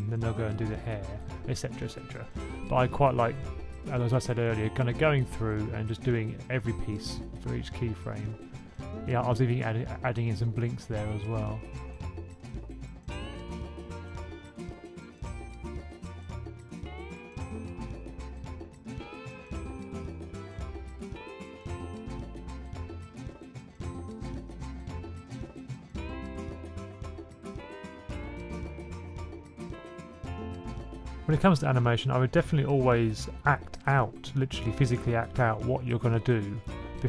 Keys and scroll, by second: 0.0 super+c, 0.2 super+c, 0.2 super+v, 3.3 F6, 3.9 b, 4.1 b, 4.2 super+z, 4.4 b, 4.6 super+z, 6.5 Right, 7.0 Right, 7.2 Right, 7.2 b, 7.3 b, 7.4 b, 9.4-10.4 typing, 10.8 alt+Up, 15.4 super+c, 16.2 F6, 25.2 F6, 26.2-27.8 typing, 27.8 super+v, 28.2 super+c, 28.4 super+v, 28.9 typing, 30.1 super+z, 33.2 F6, 36.6 super+s.